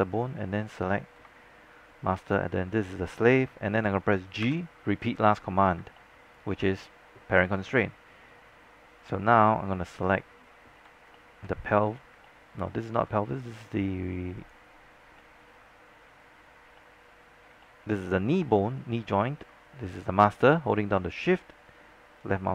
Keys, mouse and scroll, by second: 2.3 shift+click, 4.5 g, 6.1 alt+middle click, 11.2 alt+middle click, 12.2 alt+middle click, 14.5 click, 15.2 alt+middle click, 16.5 scroll up 1, 16.9 alt+middle click, 17.4 scroll down 1, 17.6 alt+middle click, 18.6-19.1 scroll up 1, 19.1 alt+middle click, 22.3 shift+click.